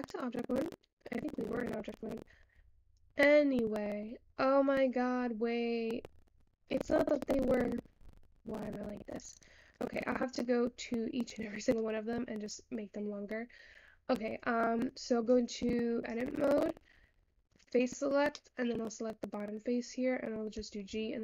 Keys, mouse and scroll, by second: 0.9-1.4 scroll down 5, 1.4 middle click, 1.6-2.2 scroll up 3, 2.2 scroll up 1, 2.3 scroll down 1, 2.4-5.5 middle drag, 6.4-7.7 scroll up 4, 7.7 shift+middle click, 8.1-9.3 scroll down 1, 9.3 click, 9.8-11.4 shift+middle drag, 11.4-11.9 scroll up 1, 11.9-14.2 middle drag, 14.2-15.3 scroll down 1, 15.3-17.7 drag, 19.1 middle click, 19.4 click.